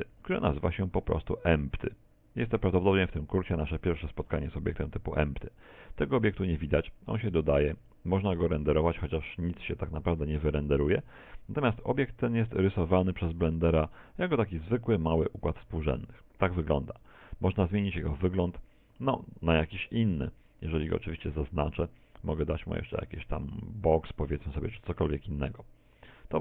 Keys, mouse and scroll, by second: 11.4 z, 12.0-12.7 scroll up 3, 12.8 click, 14.8 middle click, 15.6 a, 16.0 middle click, 18.1 middle click, 20.2 right click, 22.9 click, 25.2 click.